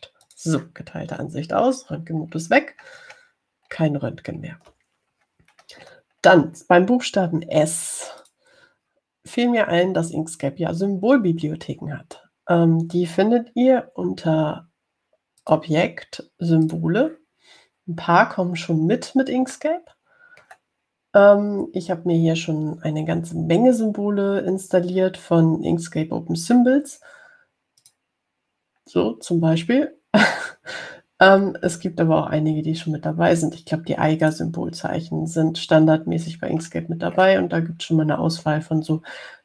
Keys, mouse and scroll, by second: 1.4 click, 3.5-4.4 scroll down 2, 4.9 ctrl+scroll down 2, 6.1-7.7 scroll down 4, 9.4 click, 16.6 click, 17.8 click, 20.7-21.9 middle drag, 29.0 click, 31.1 scroll down 2, 35.4 click, 37.6-38.6 scroll down 2, 38.7 scroll down 2.